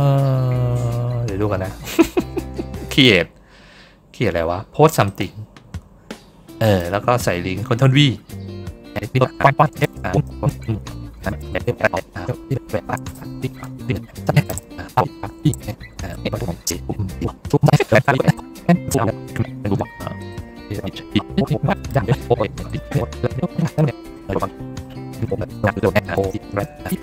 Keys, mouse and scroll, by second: 0.1 scroll up 2, 1.8 middle click, 2.8 click, 4.9 click, 6.5 click, 16.5 middle click, 18.6 middle click, 19.7 middle click, 20.1 click, 20.9 click, 21.1 middle click, 21.3 middle click, 21.9 middle click, 22.2 middle click, 22.4 middle click, 22.6 click, 23.0 middle click, 23.4 middle click, 23.5 click, 23.8 click, 24.1 click, 24.5 click, 25.7 click.